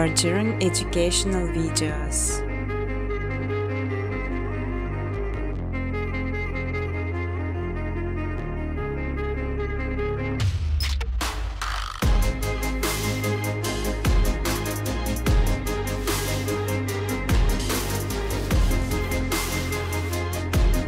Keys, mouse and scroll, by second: 0.3 click, 0.8 ctrl+c, 1.1 ctrl+d, 2.0 typing, 2.3 click, 3.3 click, 5.6 click, 5.8 space, 6.9 space, 7.5 click, 7.8 right click, 9.3 click, 10.8 click, 11.9-13.3 typing, 14.8 click, 15.0 click, 16.1 click, 16.7-18.0 typing.